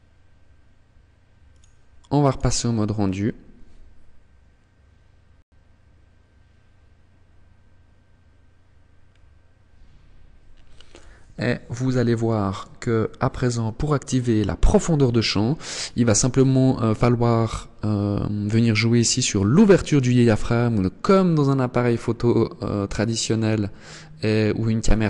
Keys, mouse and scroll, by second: 0.7 click, 1.4 click, 7.9 scroll up 1, 23.7 click.